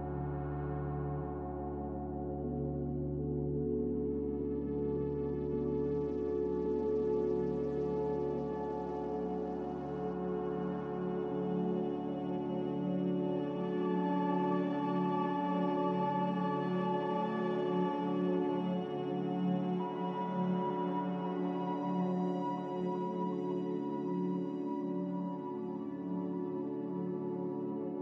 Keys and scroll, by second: 19.1 ctrl+j, 23.0 1, 24.9 0.